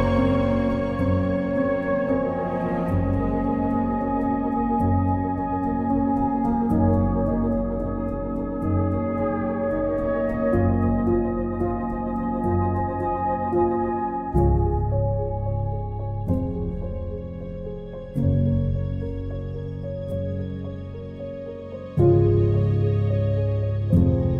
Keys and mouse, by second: 1.2 k, 2.2 click, 4.0 click, 4.9 click, 6.0 click, 6.6 click, 7.5 click, 8.0 click, 9.5 click, 10.2 click, 11.0 click, 12.2 click, 13.0 click, 13.6 click, 14.5 click, 15.3 click, 16.9 click, 17.9 click, 18.5 click, 19.1 click, 21.5 click.